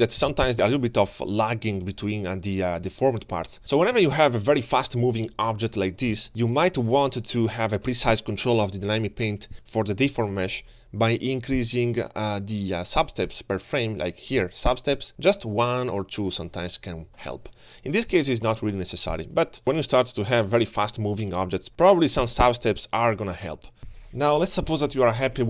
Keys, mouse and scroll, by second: 3.4 space, 4.5 click, 6.1 space, 6.6 g, 8.6 space, 9.5 alt+shift+z, 9.5 click, 10.0 g, 11.4 click, 15.3 click, 19.4 click, 19.6 click, 19.6 space, 19.8 space, 20.4 space, 20.7 g.